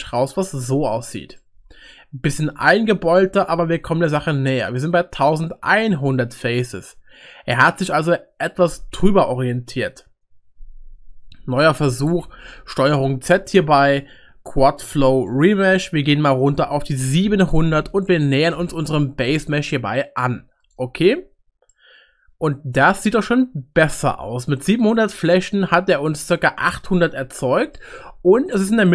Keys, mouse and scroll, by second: 0.1 middle click, 1.4-4.8 middle drag, 12.2 ctrl+z, 15.2-21.0 drag, 17.7 0, 21.7-25.2 middle drag.